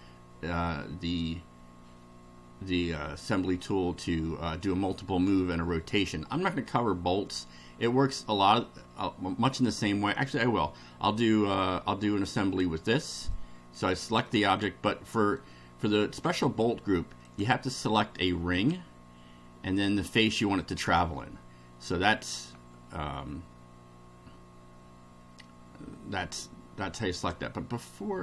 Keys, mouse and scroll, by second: 3.5-4.8 middle drag, 12.3 click, 13.3-14.4 middle drag, 14.5-15.5 middle drag, 17.3 click, 18.5 click, 20.6 ctrl+click, 27.2 click.